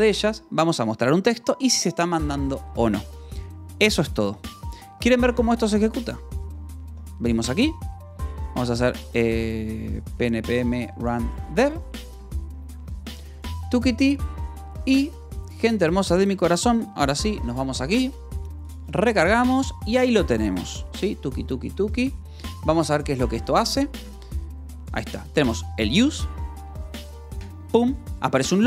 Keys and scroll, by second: 0.0 j, 0.6 k, 1.3 Escape, 1.4 j, 2.2 shift+v, 6.8 w, 8.2-11.8 typing.